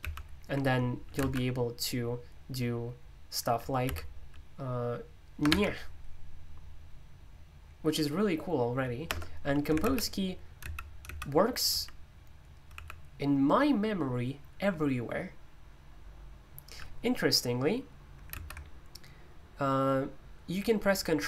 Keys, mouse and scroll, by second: 3.8 n, 5.4 shift+`, 9.0 BackSpace, 9.8 super+m, 10.6 super+,, 12.7 super+u, 18.3 super+m.